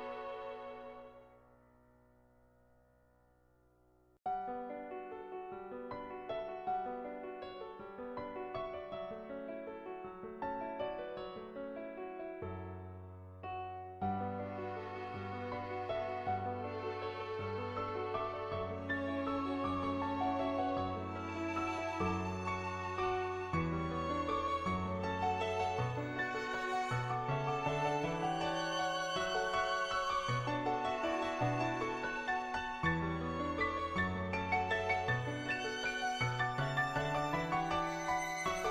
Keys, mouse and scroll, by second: 0.3 click, 0.8 shift+click, 1.8 click, 3.4 click, 5.2 click, 6.8 middle click, 10.4-15.0 drag, 16.7 middle click, 17.5 shift+click, 18.1 shift+click, 18.5 middle click, 19.2 shift+click, 20.5 click, 22.0 click, 22.3 shift+click, 23.5 click, 24.4 click, 25.2 click, 25.9 click, 26.2 shift+click, 26.6 middle click, 27.7 shift+click, 28.3-29.5 middle drag, 29.9 middle click, 30.6 shift+click, 31.3 shift+click, 31.5-34.2 middle drag, 34.4 shift+click.